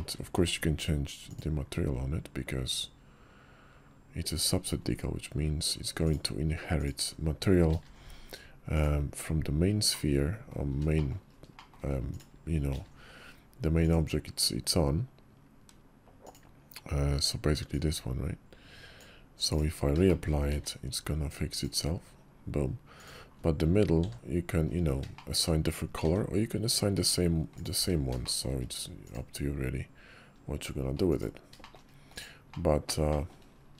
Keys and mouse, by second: 1.2 d, 6.6 click, 7.6 alt+m, 9.8-10.4 drag, 10.8 shift+drag, 11.4 shift+drag, 12.0 click, 12.6 alt+m, 16.1 click, 19.3 click, 19.9 shift+middle click, 21.5 d, 22.8 click, 23.9 f, 25.0 shift+middle drag, 25.9 d, 26.8 f, 27.4 click, 27.6 d, 31.5 shift+click, 32.0 click, 32.4 click, 33.0 shift+click.